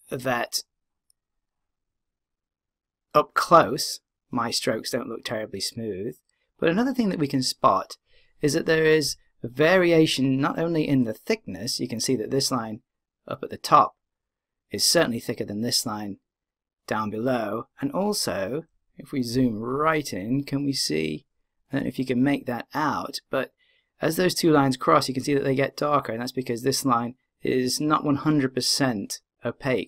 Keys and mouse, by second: 19.7-21.4 middle drag.